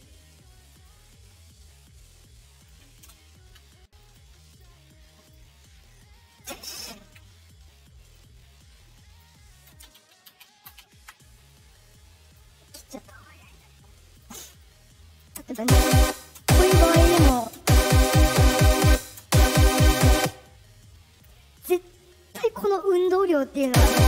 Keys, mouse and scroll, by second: 0.8-2.6 drag, 3.9 click, 4.4 click, 5.1 click, 8.1-9.1 drag, 11.8 shift+click, 12.7 right click, 13.4 right click, 14.1 click, 14.5 click, 15.5-17.5 typing, 18.8 space, 19.1 space, 20.1 space, 20.6 middle click, 20.6-20.9 scroll up 2, 23.6 space.